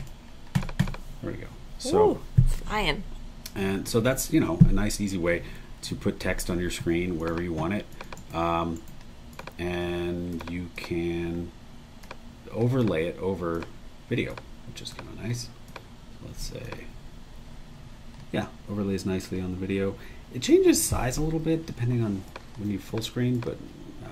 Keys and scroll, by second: 1.8 ↺, 5.8 Escape, 8.1 super+e, 17.0 Escape.